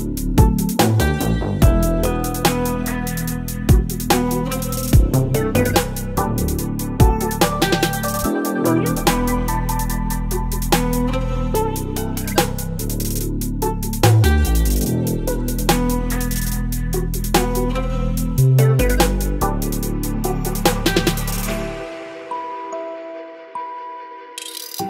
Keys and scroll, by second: 9.8 Return, 12.6 space, 18.7 ctrl+t.